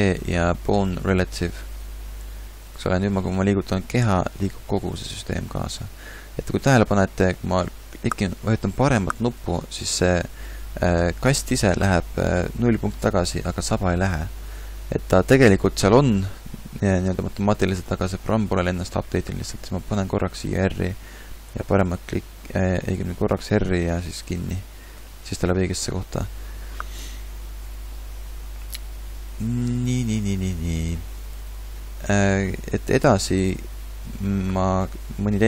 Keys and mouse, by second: 3.7 r, 5.8 click, 5.8 r, 11.3-14.5 middle drag, 16.7-20.0 middle drag, 20.0 r, 22.8 r, 24.7 middle click, 25.2 a, 25.9-28.4 middle drag, 29.4-35.4 middle drag.